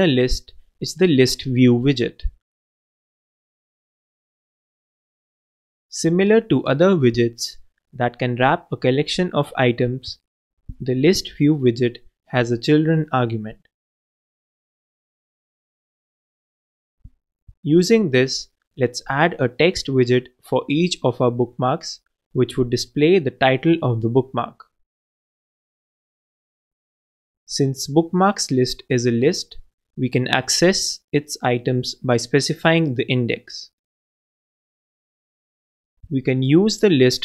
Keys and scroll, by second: 1.6 shift+Left, 3.9-5.8 typing, 6.4 shift+Return, 7.0-7.8 typing, 9.9 alt+Left, 11.2 alt+space, 24.9 shift+t, 25.2 shift+e, 25.9 shift+Return, 26.5 shift+9, 26.8 shift+Left, 28.2-29.1 typing, 34.4 super+d.